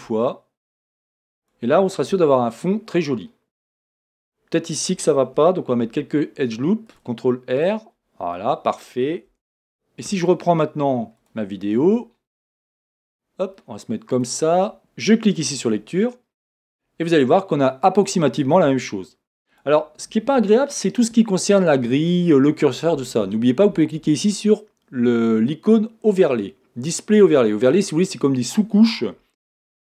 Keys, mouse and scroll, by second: 1.5 click, 2.2 Tab, 2.5-11.3 middle drag, 4.0 Tab, 5.8 ctrl+r, 7.6 click, 9.4 Tab, 11.3 click, 11.6 middle click, 11.6-12.0 scroll down 2, 12.7 scroll up 1, 12.9-13.5 scroll down 1, 13.5-15.5 middle drag, 15.5-18.1 drag, 19.5 click.